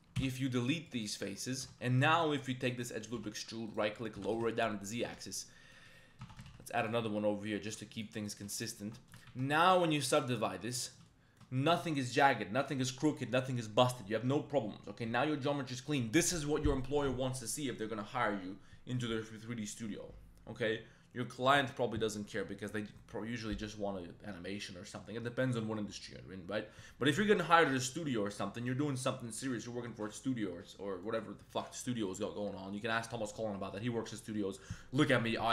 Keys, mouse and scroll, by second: 0.1 x, 1.2 click, 1.5 1, 1.8 alt+middle click, 2.2 click, 3.1 e, 4.1 g, 4.3 z, 4.9 click, 5.0 Tab, 5.1 middle drag, 5.7 middle click, 6.2 Tab, 6.4 ctrl+r, 7.9 click, 8.3 shift+middle click, 8.5 middle click, 8.7 Tab, 9.0 middle click, 9.2 ctrl+1, 9.5 ctrl+2, 9.9 ctrl+3, 10.2-10.7 middle drag, 10.9 shift+drag, 11.3 middle drag, 28.0 middle click, 28.5 right click, 28.9 click, 31.0 right click.